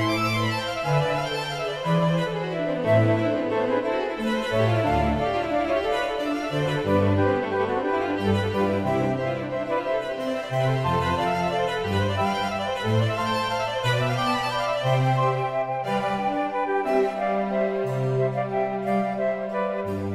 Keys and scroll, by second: 6.3 space, 11.2 space.